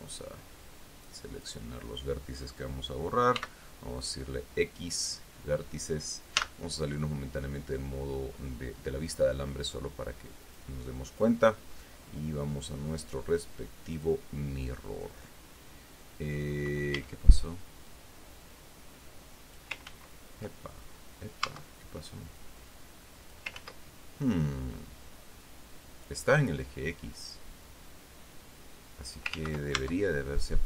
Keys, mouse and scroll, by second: 0.2-2.0 drag, 3.7 x, 5.3 click, 6.7 z, 9.6 middle click, 10.8 click, 11.4 click, 14.3 click, 17.3 a, 18.2-20.1 drag, 20.2 ctrl+z, 21.8 Tab, 22.7-23.8 drag, 23.9 ctrl+z, 28.0-29.7 drag, 29.7 ctrl+z, 30.1 ctrl+Tab.